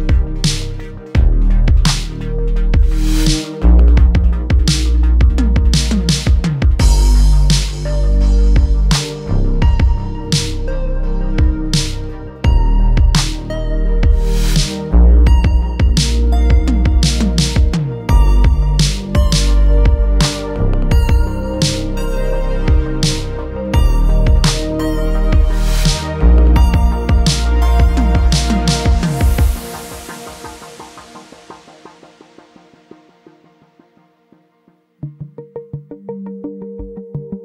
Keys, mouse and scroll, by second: 2.3 click, 2.7 middle click, 3.5 scroll up 1, 3.7 Tab, 4.9-5.4 middle drag, 5.7-6.8 right drag, 7.4-8.2 middle drag, 8.5 Tab, 9.1 click, 11.5 3, 11.8 click, 13.6 s, 16.7 click, 17.1 middle click, 17.8 g, 18.0 z, 20.4 click, 20.8 middle click, 21.2 Tab, 21.7-22.1 middle drag, 22.6 g, 22.8 z, 24.1 click, 24.8 s, 26.9 click, 27.2-27.8 middle drag, 28.6 g, 28.9 z, 30.8 click, 31.2 middle click, 31.7 click, 32.0-32.3 scroll down 1, 32.3-32.8 middle drag, 32.8 Tab, 33.3 Tab, 34.0 click, 35.4 click, 36.7 click.